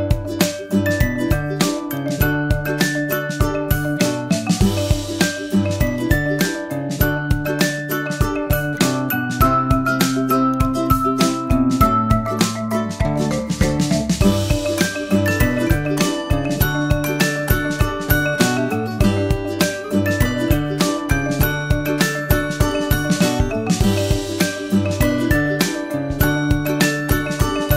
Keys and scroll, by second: 27.4 super+j.